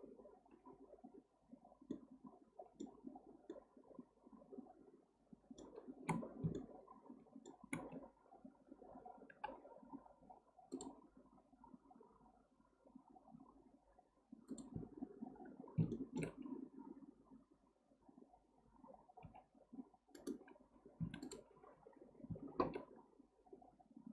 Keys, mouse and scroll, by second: 6.2-6.5 scroll down 1, 6.5-7.9 shift+middle drag, 7.9-8.5 scroll up 1, 9.3 k, 15.5-15.9 scroll up 2, 15.9-19.0 shift+middle drag, 21.0 2, 21.2 click, 22.6 ctrl+b.